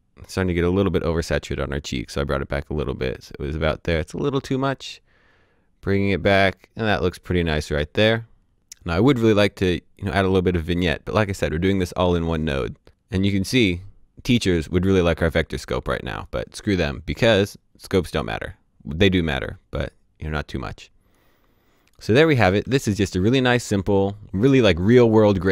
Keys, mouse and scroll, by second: 2.8 click, 16.2 click, 21.1 click.